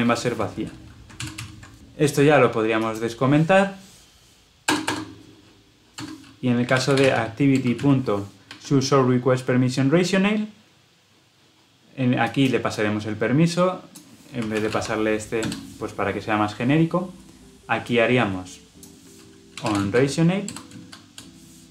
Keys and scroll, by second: 1.0 ctrl+alt+l, 1.2 ctrl+alt+o, 7.5 Return, 8.0 Escape.